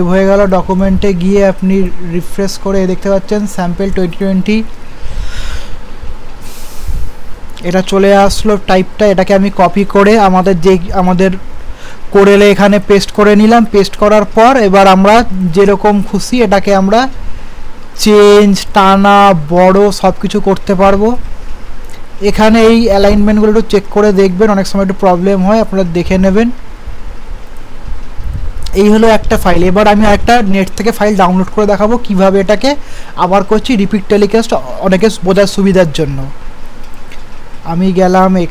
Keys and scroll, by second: 9.4 ctrl+a, 10.3 ctrl+c, 13.5 ctrl+v.